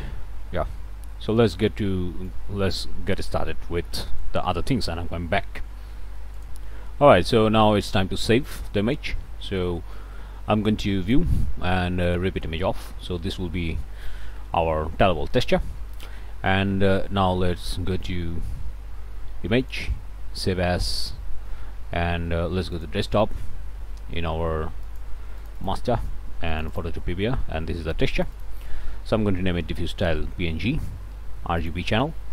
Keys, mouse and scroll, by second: 1.8 right click, 2.7 middle click, 6.5 click, 7.6 click, 11.0 click, 12.0 click, 12.8 click, 13.2 middle click, 13.8 click, 15.0-16.1 drag, 16.1 click, 19.6 click, 20.9 click, 22.7 click, 24.8 click, 25.4 click, 26.5 click, 28.1 click, 31.6 click.